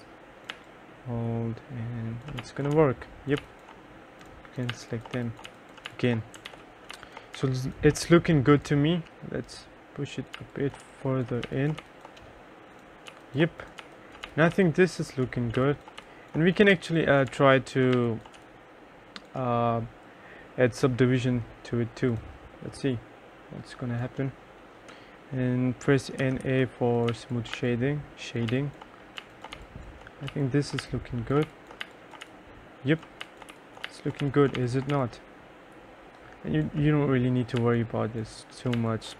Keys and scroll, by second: 0.6 3, 2.5 2, 2.9 3, 3.5 2, 5.0-7.5 typing, 6.6 ctrl+s, 10.5 2, 10.9 3, 11.6 2, 11.9 1, 13.3-18.5 typing, 26.1-28.6 typing, 29.7-35.5 typing, 38.6-39.1 typing.